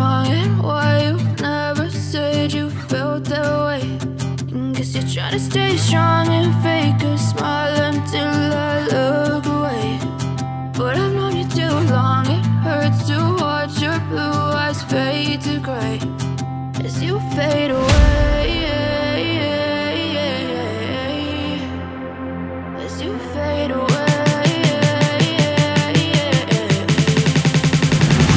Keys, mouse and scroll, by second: 1.2 double click.